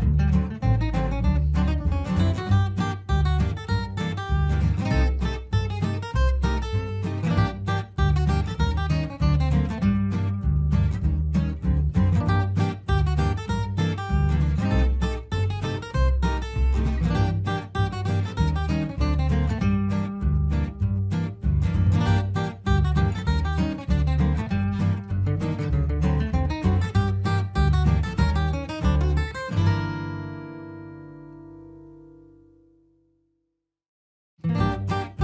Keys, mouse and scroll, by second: 0.1 alt+click, 1.4 c, 1.8 ctrl+g, 2.9-4.4 shift+drag, 4.4 F2, 4.6-6.1 drag, 6.1 F8, 6.3 click, 7.0-9.2 typing, 8.9 click, 9.9 ctrl+space, 11.0-14.0 drag, 14.0 ctrl+super+k, 14.9-20.3 drag, 20.3 g, 21.0 click, 23.7 right click, 24.2 F12, 25.1-32.0 drag, 34.4 space, 35.1 ctrl+k.